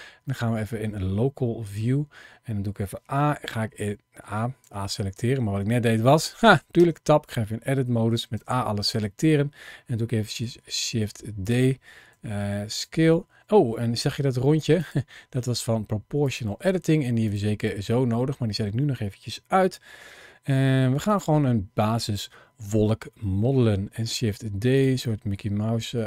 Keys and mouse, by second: 0.1 middle click, 1.5 Tab, 4.5 a, 4.6 a, 5.0 a, 6.3 Tab, 6.6 Tab, 8.2 a, 8.4 a, 8.7 a, 10.3 shift+d, 12.0 s, 12.6 click, 13.8 g, 14.6 click, 15.0 g, 16.1 click, 17.1 click, 17.9 middle click, 20.9 click, 23.8 shift+d, 25.0 middle click.